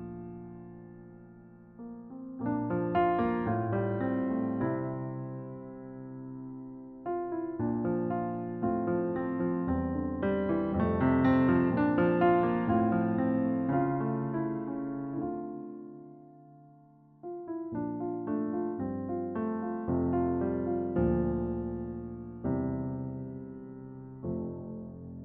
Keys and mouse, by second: 0.2 click, 0.9 click, 2.7 click, 4.3-5.4 drag, 5.5 shift+a, 6.5 click, 7.4 click, 8.5 click, 9.6 click, 9.9 0, 10.5 click, 10.8-12.6 drag, 13.3 click, 13.9 click, 16.9 click, 17.3-18.5 drag, 17.8 0, 19.0 click, 20.6 click, 20.9 click, 23.1 drag, 23.4-23.9 drag.